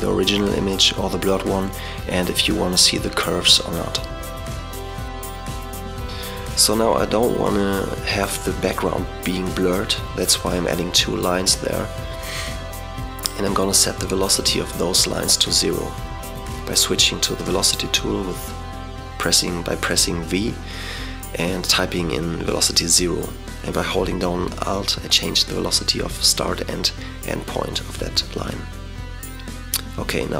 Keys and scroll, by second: 15.7 v, 18.7 v, 19.0 alt+0, 21.7 alt+0, 24.0 super+0.